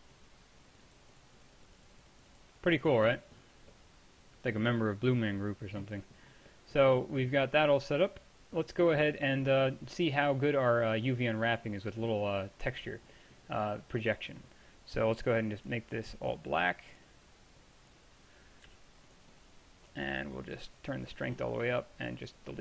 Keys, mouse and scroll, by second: 3.6-4.7 middle drag, 5.2-13.3 middle drag, 15.7-18.7 drag, 18.7 f.